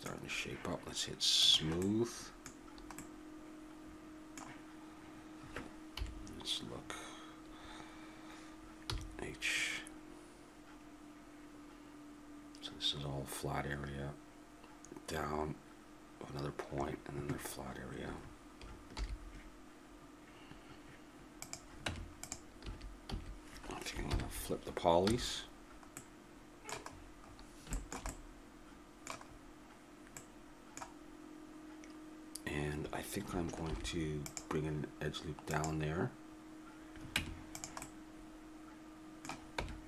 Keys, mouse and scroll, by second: 1.4-3.7 drag, 5.9 KP_7, 8.8 h, 19.0 alt+h, 21.4-24.1 drag, 21.8 Tab, 22.6 a, 23.1 a, 24.1 ctrl+n, 25.0 a, 28.1-29.3 middle drag, 29.3-33.7 middle drag, 33.7 ctrl+r, 37.2 Tab, 39.6 Tab.